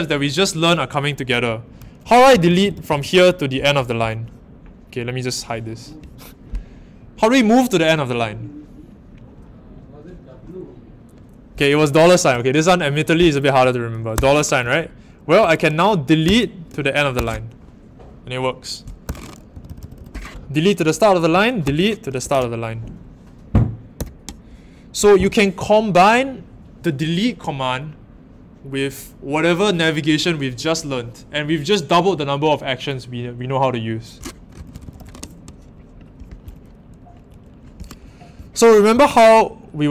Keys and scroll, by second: 1.7-3.4 typing, 14.1-17.1 typing, 19.0-19.9 typing, 21.6 d, 22.1 shift+6, 23.9 typing, 34.5-34.9 typing, 38.6-39.6 typing.